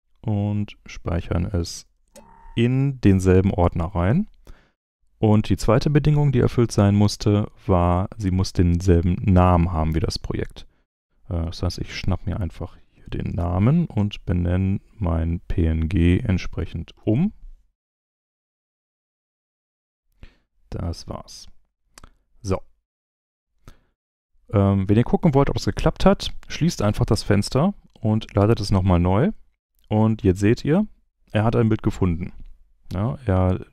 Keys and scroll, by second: 1.9 super+v, 13.3 super+c, 17.0 super+v, 18.1 super+Return.